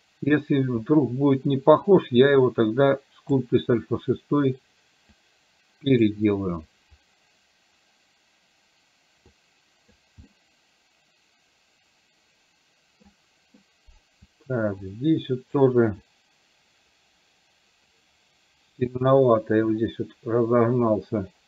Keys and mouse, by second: 2.0-3.5 drag, 5.2-6.2 drag, 9.5 click, 10.2-13.1 middle drag, 14.9 shift+click, 16.0-21.4 shift+drag.